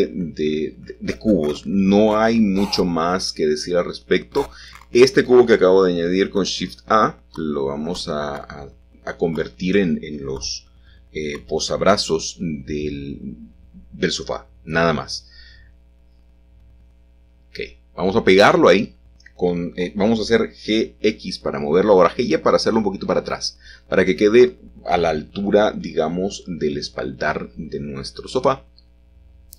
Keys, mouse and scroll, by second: 0.3 shift+a, 1.5 click, 2.9 g, 3.5 shift+z, 5.4 click, 6.7 s, 6.9 x, 9.2 click, 11.9 s, 13.0 click, 13.9 g, 14.8 x, 17.9 shift+click, 18.9-19.3 typing, 26.6 shift+click, 27.8-28.4 typing.